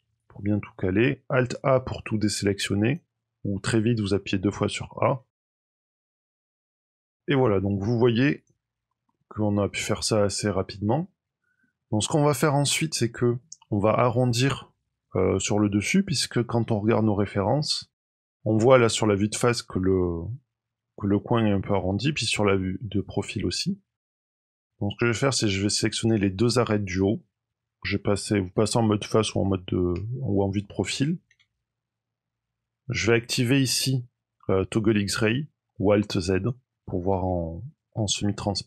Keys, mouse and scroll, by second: 1.5 click, 3.1-4.5 scroll up 1, 4.5-5.3 scroll up 2, 5.3 a, 5.4 a, 5.9 b, 6.3 click, 6.7 middle click, 8.3 click, 8.7-9.1 scroll down 2, 9.0 middle click, 11.8-12.4 scroll up 2, 12.4 scroll down 3, 17.4 click, 17.9 scroll up 2, 18.1 middle click, 22.0 KP_3, 24.2 click, 24.3 scroll down 2, 24.4 middle click, 24.5-25.1 scroll up 2, 25.1 click, 25.9 click, 26.7 shift+click, 29.7 KP_3, 30.4-31.2 scroll up 3, 36.2 click, 37.2 shift+middle click, 38.3-38.6 scroll up 2.